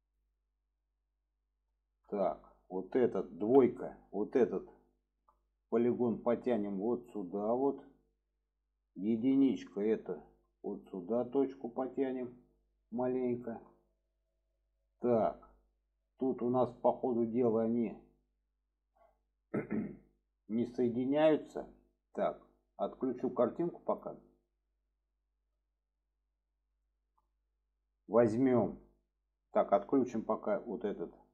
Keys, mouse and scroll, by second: 0.8-1.9 middle drag, 2.1 shift+middle click, 4.1-4.7 drag, 4.1 typing, 5.7-7.3 drag, 9.7-12.7 drag, 9.7 typing, 13.1-13.5 shift+middle drag, 14.5-15.7 middle drag, 17.6-20.7 middle drag, 21.3 middle drag, 23.9 click, 24.3-26.0 middle drag, 26.8-27.1 shift+middle drag, 28.3 shift+middle click, 30.4 click, 31.1-31.3 middle drag.